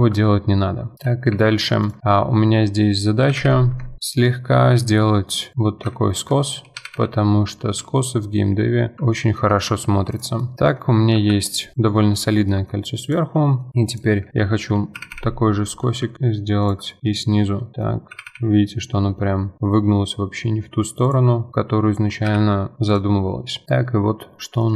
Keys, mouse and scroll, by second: 0.3-1.0 scroll up 1, 1.0 middle click, 1.3 2, 1.8 alt+click, 2.3 middle click, 3.2 g, 5.5 middle click, 5.7 2, 6.1 alt+click, 6.8 g, 9.1 middle click, 9.5 Tab, 9.7 scroll down 3, 10.1 click, 10.4-11.1 middle drag, 11.1 KP_1, 11.7 click, 12.0-12.4 scroll up 6, 12.5-13.1 middle drag, 13.1 click, 13.4 middle drag, 13.7 2, 13.9 alt+click, 15.0 g, 16.9-18.1 middle drag, 18.1 g, 21.3 middle click, 21.5 Tab, 21.6-22.3 middle drag, 22.3 KP_1, 22.9 click, 23.6 middle click, 23.9-24.4 scroll down 1, 24.4-24.7 middle drag.